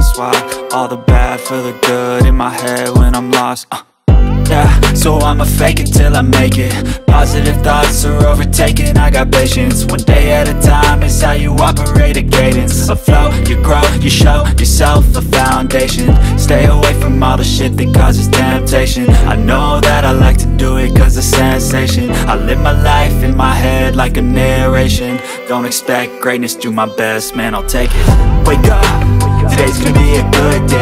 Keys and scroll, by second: 18.4 ctrl+j.